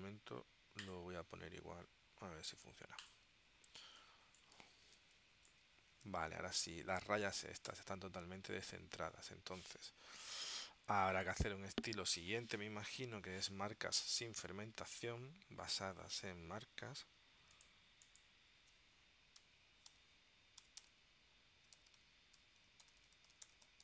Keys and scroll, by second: 4.0 space, 5.1 space, 6.2 space, 7.8 w, 19.5-23.8 typing.